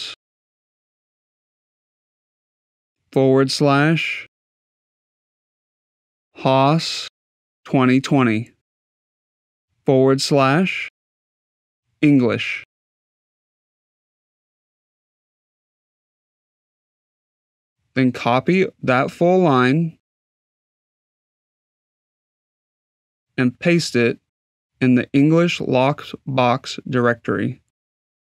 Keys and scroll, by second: 0.0-1.2 typing, 3.7 \, 4.8-6.3 typing, 7.4-8.9 typing, 9.9-12.4 typing.